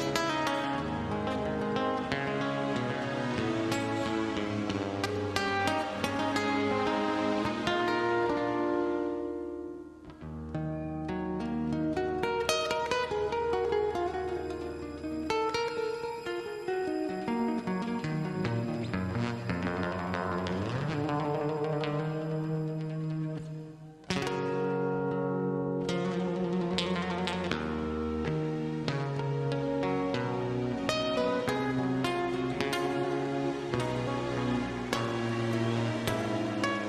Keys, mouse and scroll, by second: 3.7 click, 5.9-6.5 typing, 7.7 typing, 8.7 click, 12.6-13.0 scroll down 1, 13.0 scroll up 1, 13.5 middle click, 15.1-15.8 typing, 16.2 scroll up 1, 17.6 click, 19.8-20.1 scroll down 1, 20.8 click, 21.7 click, 22.1 scroll down 1, 22.5 scroll up 1, 23.0 middle click, 23.6 typing, 24.7 Return, 25.2-25.5 scroll up 1, 27.5 click, 27.9 scroll down 1, 28.7-30.3 scroll up 1, 32.8 Escape, 33.8 c, 34.8 scroll up 1, 36.5 click.